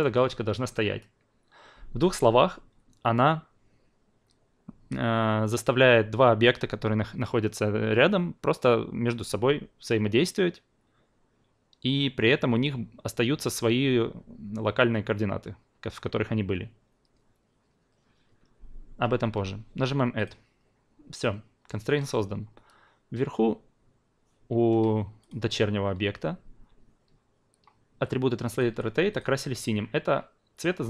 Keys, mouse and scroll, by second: 20.2 click, 25.2-30.8 drag.